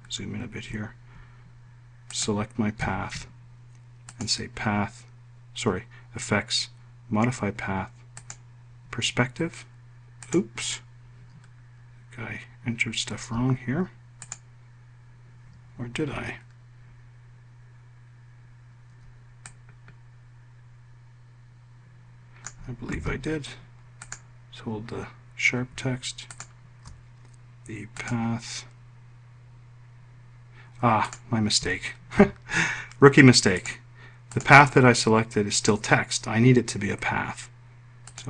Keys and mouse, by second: 2.6 shift+click, 4.6 click, 8.7 click, 10.7 click, 19.9-23.0 drag, 23.4 ctrl+z, 24.5 click, 26.8 shift+click, 34.0 click, 34.8 click.